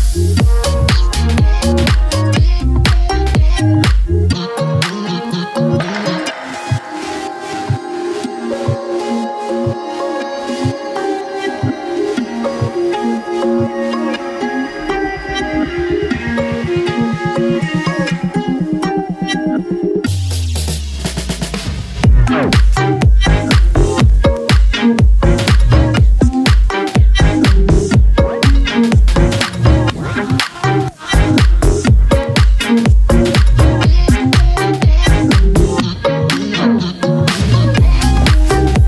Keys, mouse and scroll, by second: 0.7 click, 3.6 click, 5.9 click, 9.3 click, 15.4 click, 17.7 click, 20.8 click, 23.7 click, 24.4-24.8 scroll down 1, 24.8 click, 29.9-35.4 drag, 36.9 scroll up 1, 38.5 click.